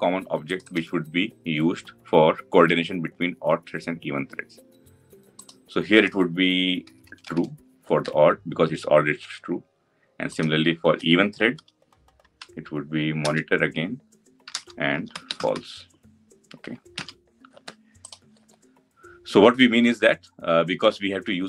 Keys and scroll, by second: 13.0 Return, 16.8 ctrl+alt+l.